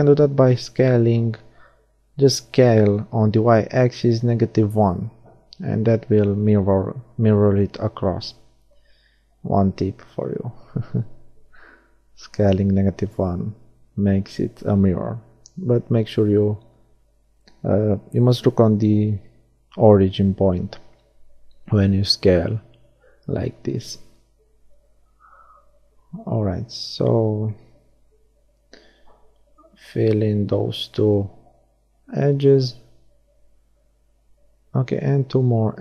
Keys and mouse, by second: 0.3-1.9 middle drag, 5.6 middle click, 6.7-14.5 middle drag, 14.5 shift+d, 15.1-17.0 drag, 17.0 middle click, 18.8 r, 24.4-26.0 middle drag, 26.0 shift+d, 26.6 click, 26.7 r, 33.4 middle click, 35.3 r.